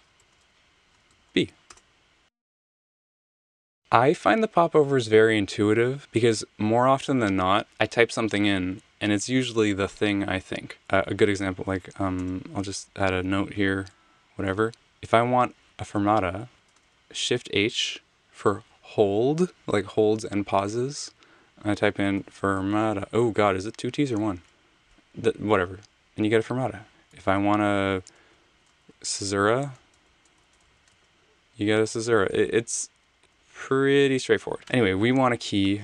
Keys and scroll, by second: 0.2 k, 1.1 b, 1.6 Return, 2.8 super+z, 12.2 Return, 13.5 a, 14.7 Return, 16.5 h, 21.7-23.0 typing, 24.1 Return, 25.3-25.7 typing, 27.2 super+z, 28.5-31.1 typing, 32.4 z, 33.2 super+z, 34.6 BackSpace.